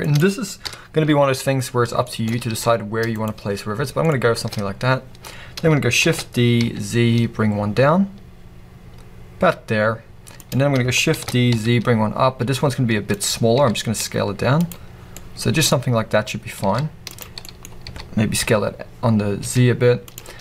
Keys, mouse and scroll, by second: 0.1 click, 1.5 scroll, 2.5 s, 3.3 click, 3.4-4.0 scroll, 4.7-6.0 scroll, 13.2 click, 13.5 s, 14.7 click, 14.9 scroll, 15.1 middle click, 15.7-16.6 scroll, 16.6 middle click, 16.6 s, 17.2 click, 17.4-20.1 middle drag, 17.6 scroll, 17.8 s, 20.1 click.